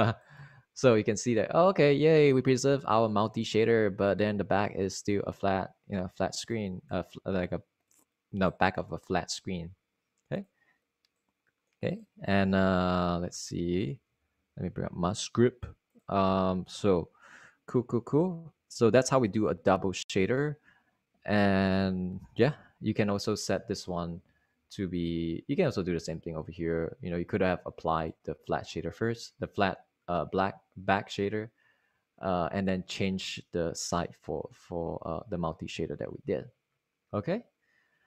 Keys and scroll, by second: 13.9 super+Right, 14.6 super+Right, 15.9 super+Right.